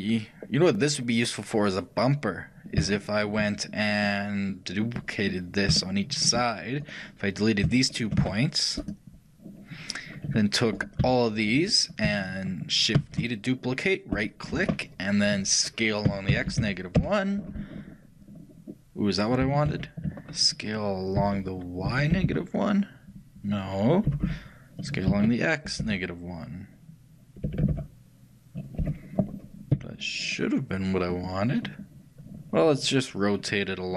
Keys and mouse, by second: 3.0-7.6 shift+middle drag, 7.6-13.1 shift+right drag, 8.2 shift+x, 11.1 a, 13.1 shift+d, 16.2 s, 18.7-21.3 middle drag, 19.8 ctrl+z, 21.3 g.